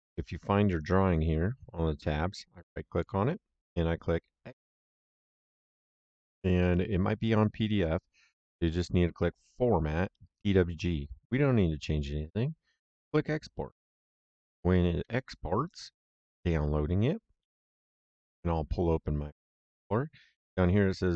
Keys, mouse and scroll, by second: 2.3 right click, 4.7 click, 6.6 click, 9.3 click, 12.9 click, 17.5 super+e, 19.2 click.